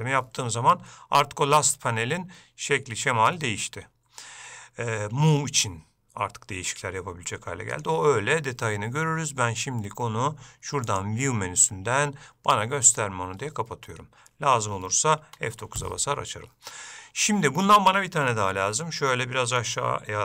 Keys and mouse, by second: 8.0 click, 11.0-13.2 drag, 18.7-19.8 shift+middle drag.